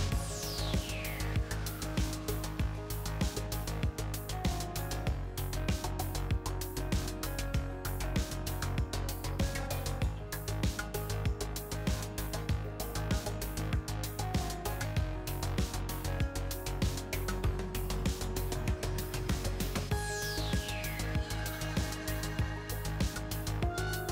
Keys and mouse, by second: 0.7 click, 0.8-2.3 middle drag, 3.5-4.7 right drag, 4.7 middle click, 5.2-9.7 middle drag, 9.7 KP_0, 9.7 KP_1, 10.6 KP_0, 14.7-15.8 middle drag, 17.3 click, 17.8 click, 19.0-21.2 middle drag, 21.3-24.1 middle drag.